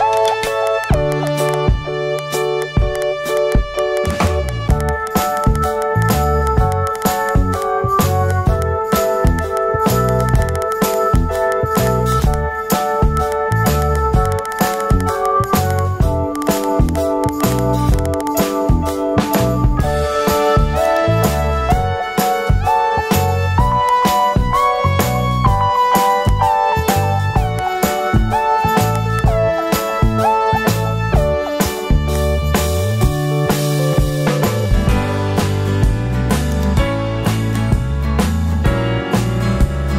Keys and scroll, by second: 19.7 super+0, 34.1 super+t, 36.3 super+t.